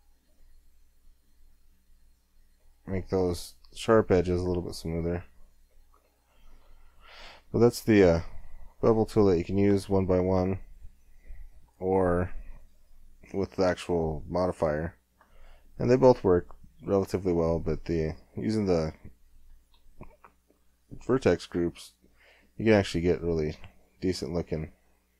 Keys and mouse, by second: 5.7 middle click, 6.6 Tab, 8.0 w, 11.7 Tab, 14.5 click, 15.4-17.0 middle drag, 17.0 click, 18.5-19.7 middle drag, 19.7 KP_1, 20.4-21.6 middle drag, 21.6 click, 22.2 Tab.